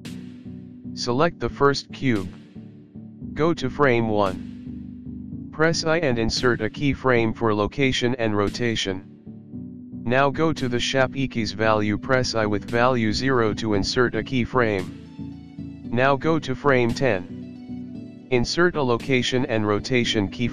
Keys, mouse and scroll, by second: 1.4 click, 4.3 i, 8.7 click, 13.4 i, 15.5 click.